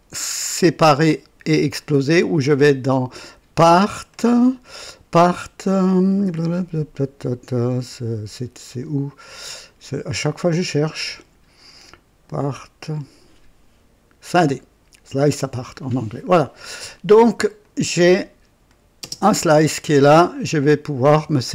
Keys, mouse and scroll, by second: 3.3 click, 4.1 click, 4.2 click, 15.2 click, 17.5 click, 18.6 click, 19.2 space, 19.7-21.0 drag, 21.4 right click.